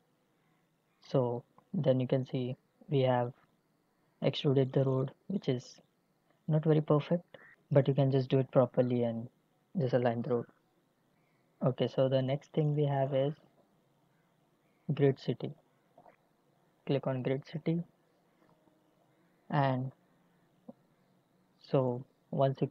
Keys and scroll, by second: 20.7 Delete.